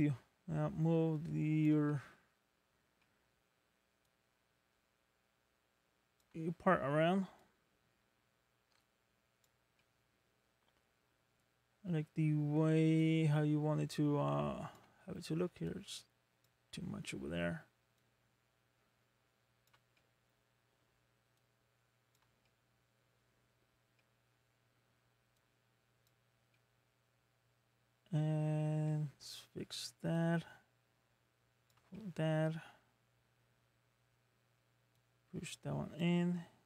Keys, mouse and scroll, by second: 1.9 middle click, 3.0 middle click, 4.0 click, 7.4 click, 9.8 middle click, 11.2 scroll up 3, 13.0 click, 15.7 click, 16.7 middle click, 18.0 click, 20.0 middle click, 21.4 click, 22.4 middle click, 23.6-24.0 scroll down 2, 24.0 middle click, 25.3 click, 26.4 scroll down 1, 26.5 middle click, 28.8 middle click, 30.1 click, 31.9 middle click, 35.0 click.